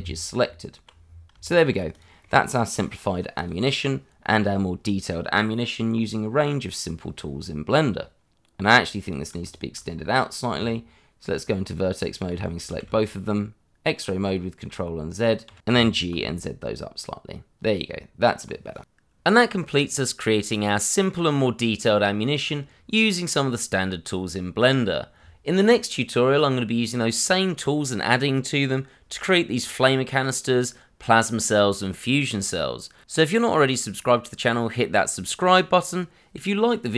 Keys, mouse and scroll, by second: 0.4 Tab, 1.0 scroll down 1, 1.4 shift+middle click, 1.9 click, 2.2 middle click, 3.4 click, 9.0 click, 9.4 shift+click, 9.5 click, 9.9 scroll up 1, 10.5 Tab, 12.7 shift+z, 13.0 click, 15.4 shift+z, 15.7 g, 16.1 z, 17.6 click, 17.8 Tab, 18.7 click, 35.6 click.